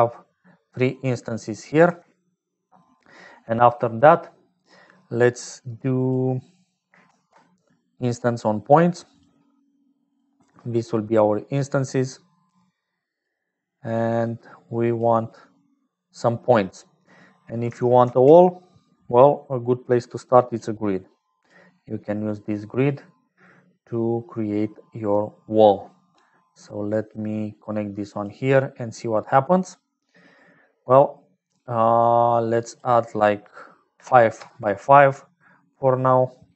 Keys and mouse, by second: 0.0-36.5 typing, 0.7 middle click, 1.4 click, 5.1 click, 11.7-13.5 drag, 14.2-15.2 drag, 15.8 click, 17.1 click, 22.1 click, 26.9-28.6 drag, 32.4-35.5 drag.